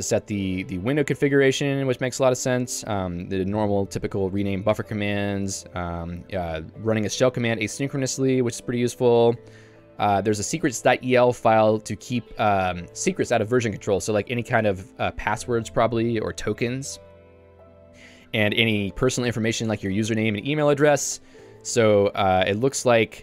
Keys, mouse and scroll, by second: 0.0-1.1 typing, 3.0-11.9 typing, 9.3 ctrl+d, 18.8 j, 20.8 Escape, 21.2 j.